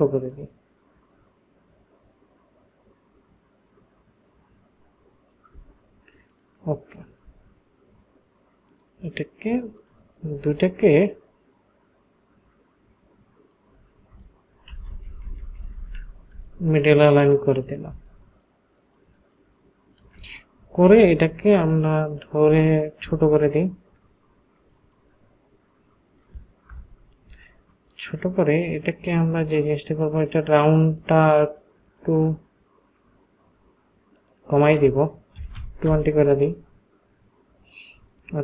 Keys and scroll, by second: 14.7 Down, 14.9 Down, 15.1 Down, 15.2 Down, 15.4 Down, 15.6 Down, 15.7 Down, 15.9 Down, 17.9 ctrl+space, 22.6 ctrl+space, 26.9 Return, 35.5 KP_2, 35.8 Return, 35.8 KP_0.